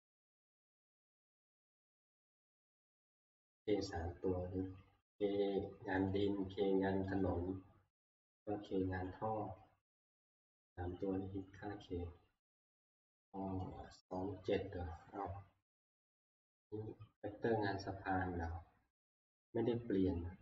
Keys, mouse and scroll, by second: 6.1 click, 7.2 click, 8.3 click, 13.8-18.9 drag.